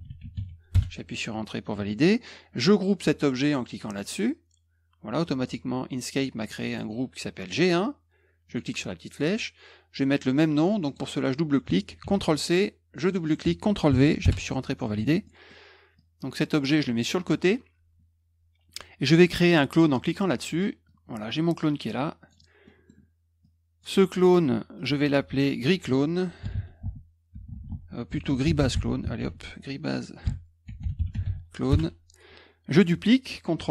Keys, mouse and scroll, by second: 0.0-0.8 typing, 3.9 click, 8.4 click, 10.7 click, 10.8 click, 12.0 ctrl+c, 12.9 click, 13.0 click, 13.8 ctrl+v, 14.2 Return, 15.2 middle click, 15.9 click, 16.9 middle click, 20.0 click, 20.8-22.3 drag, 22.6 middle click, 23.4 click, 24.7 click, 25.0 click, 26.1-28.8 typing, 29.2 ctrl+v, 29.9-31.7 typing.